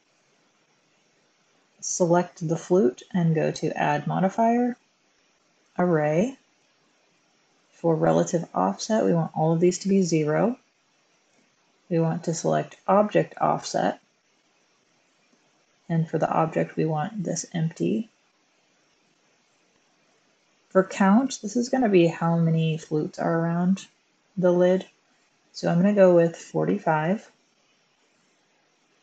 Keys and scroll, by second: 9.6 typing, 10.0 Return, 26.7-27.4 typing, 27.7 Return.